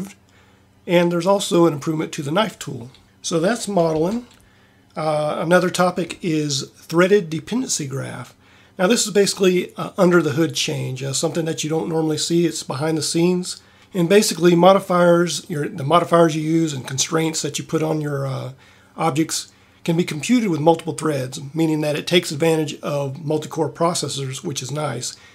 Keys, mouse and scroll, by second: 4.0 Tab.